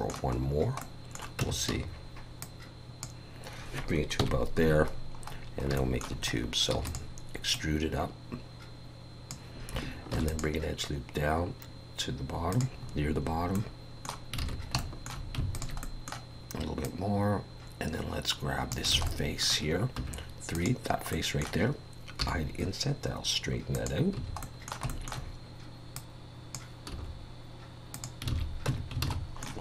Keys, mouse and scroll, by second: 0.4-0.8 scroll down 2, 0.8 middle click, 1.4 Tab, 1.7 a, 2.4 click, 4.2 KP_1, 4.9-5.7 scroll down 6, 5.8 shift+middle click, 6.3 scroll up 1, 6.7 e, 7.5 click, 10.1 ctrl+r, 12.9-13.5 scroll up 7, 13.5 middle click, 14.4 alt+a, 14.8 shift+middle click, 15.5 alt+shift+click, 15.8 middle click, 16.8 click, 18.9 alt+a, 19.1 middle click, 20.0 3, 20.5 click, 21.1 middle click, 22.2 i, 24.2 a, 24.4 middle click, 25.0 shift+middle click, 26.0 click, 26.9 s, 28.3 alt+a, 28.7 Tab, 29.1 alt+a, 29.2-29.6 scroll down 5, 29.4 middle click.